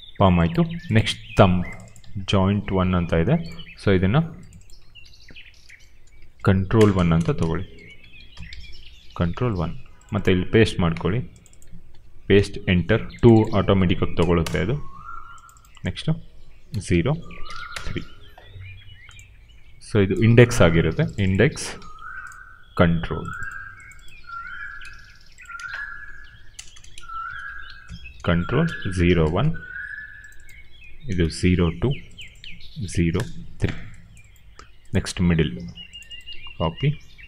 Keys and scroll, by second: 0.6 q, 2.3 ctrl+c, 4.9 ctrl+v, 5.9 Left, 6.6-8.8 typing, 8.9 ctrl+c, 11.8 ctrl+v, 12.4 Return, 13.7 ctrl+v, 14.1 BackSpace, 14.3 Return, 15.9-17.3 typing, 17.6 Return, 21.5 ctrl+c, 24.1 ctrl+v, 25.4-28.3 typing, 26.1 Right, 28.4 Right, 28.9 ctrl+a, 29.1 ctrl+c, 30.5 ctrl+v, 31.1 Return, 32.6 ctrl+v, 33.1 Return, 36.7 ctrl+c.